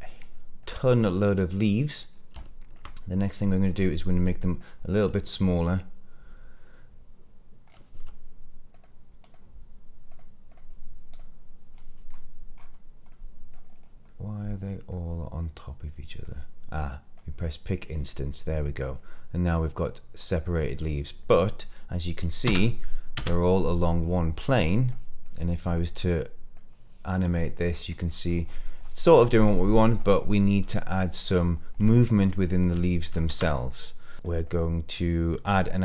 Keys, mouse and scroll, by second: 0.2-0.5 scroll down 2, 0.5-2.0 middle drag, 2.0 scroll up 1, 2.3-2.7 shift+middle drag, 3.0 scroll down 1, 3.3 middle click, 4.5-7.6 drag, 8.6 click, 9.1 click, 10.0 click, 10.4 click, 11.0 click, 12.0-13.0 scroll up 4, 13.0-13.5 middle drag, 13.6-14.0 scroll down 3, 14.0-15.0 middle drag, 15.0-15.3 scroll down 2, 15.3 middle click, 17.1 click, 18.1-22.2 middle drag, 22.4 space, 23.1 space, 23.9 middle click, 24.6 scroll down 2, 24.8 middle click, 26.4-32.5 drag, 33.1 ctrl+z, 33.8 middle click, 34.1 click.